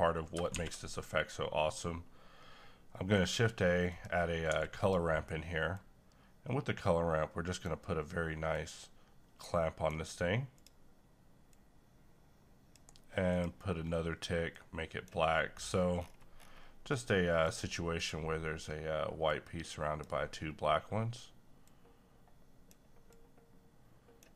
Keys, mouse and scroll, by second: 0.1 scroll down 1, 0.5 a, 3.1 click, 4.5 g, 4.8-15.5 drag, 15.5-16.0 scroll up 1, 16.9-24.3 drag.